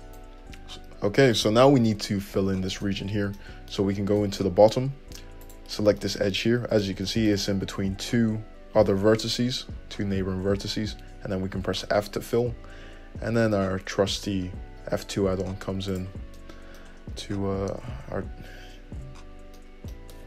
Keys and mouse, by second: 0.0-5.8 drag, 1.0 Tab, 5.8-9.6 middle drag, 10.4 f, 16.6-20.2 middle drag.